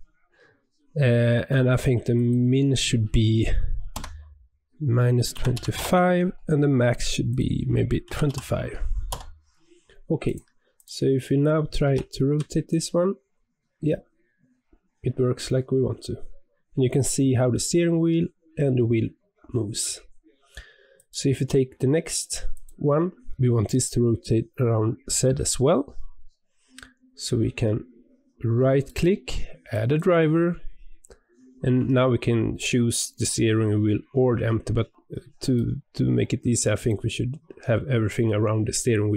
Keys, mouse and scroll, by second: 2.1-5.3 drag, 7.2-10.3 drag, 10.7 click, 11.8 r, 22.5 click, 28.8-39.1 right drag.